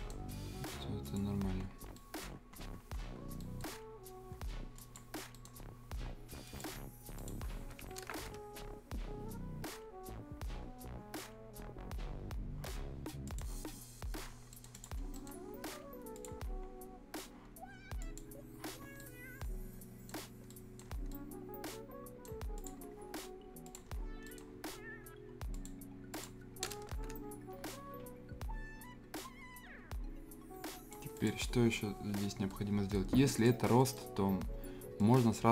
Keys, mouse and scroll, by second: 1.0 click, 1.4-1.9 scroll down 1, 1.9 right click, 2.3 scroll down 1, 3.4 right click, 3.6 scroll down 1, 4.1-4.7 scroll up 1, 5.0 click, 5.3 right click, 6.4 click, 8.5 Return, 8.6-9.2 scroll up 1, 13.2 click, 14.3 scroll down 1, 14.5 right click, 14.7 click, 15.0 scroll down 1, 15.1 right click, 16.1 click, 16.5 scroll down 1, 16.7 scroll up 1, 18.0 click, 18.8 scroll down 1, 19.0 right click, 20.2 scroll up 1, 20.5 right click, 20.9 scroll down 1, 21.1-22.5 right drag, 22.5 click, 23.9-24.2 scroll down 1, 24.2 right click, 25.5 click, 27.5 Return, 27.6 scroll down 1, 28.1-28.7 scroll up 1, 29.1 click, 29.3-31.1 drag, 32.0 scroll down 1, 32.2 scroll up 1, 32.5 right click, 33.4 click, 33.8 right click, 35.0 click.